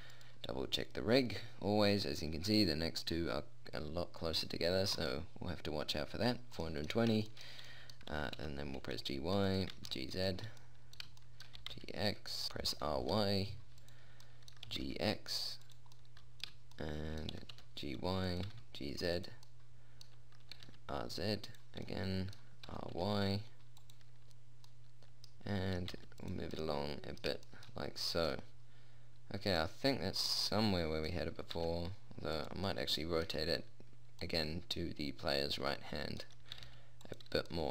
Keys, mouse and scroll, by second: 0.3 right click, 7.1-8.4 middle drag, 8.6 g, 10.1 g, 12.1 g, 12.9 r, 14.7 click, 15.1 g, 17.8 g, 18.9 g, 21.0 r, 23.1 r, 25.1-26.5 drag, 26.3 g, 32.0 r, 34.9 middle click, 37.0 r.